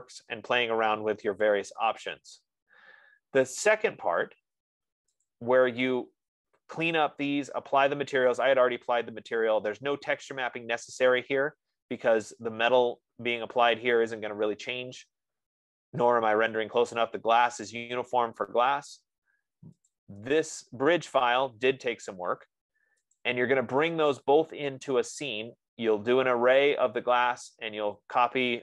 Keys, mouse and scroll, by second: 5.9 click, 13.0-13.6 scroll, 13.7-14.6 scroll up 5, 14.6-15.4 scroll up 1, 15.4-17.1 scroll down 8, 17.1-18.6 scroll down 1, 18.6-20.5 scroll down 1, 20.5 click, 21.2 scroll, 23.8 click, 28.3 click.